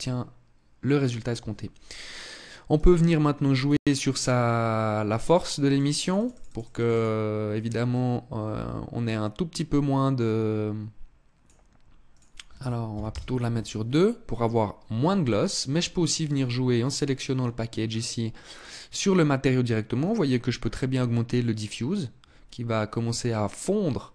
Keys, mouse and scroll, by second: 1.5 right click, 2.4 right click, 3.2 right click, 4.7 click, 5.3 click, 5.5 click, 5.7 click, 5.9 click, 6.1 click, 6.3 click, 6.5 click, 7.5 click, 11.7 click, 15.8 right click, 17.4-17.7 scroll down 3, 19.6 click, 23.9 click.